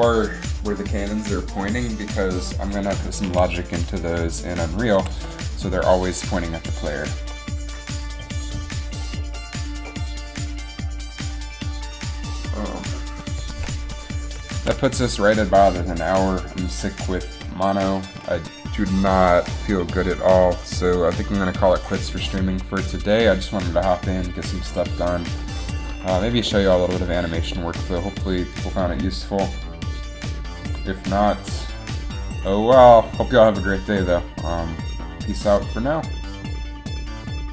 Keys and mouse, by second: 3.5 a, 5.2 r, 14.7 ctrl+s, 26.6 r, 27.5 r, 30.0 r, 34.0 r.